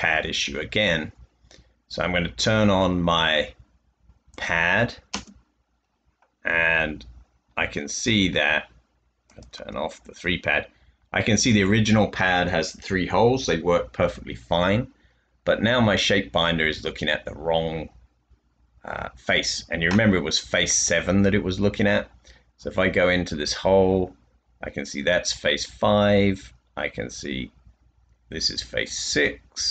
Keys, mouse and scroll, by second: 5.3 space, 8.8-9.5 typing.